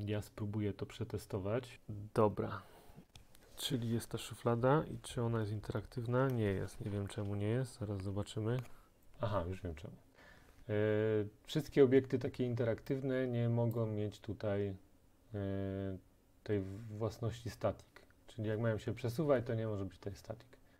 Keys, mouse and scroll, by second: 9.0 scroll, 13.8 click.